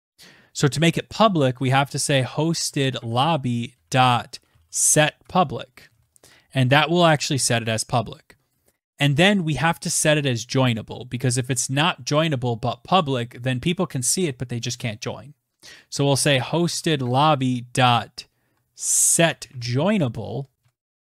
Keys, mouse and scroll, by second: 0.2-4.9 typing, 7.0 Return, 14.5-21.0 typing.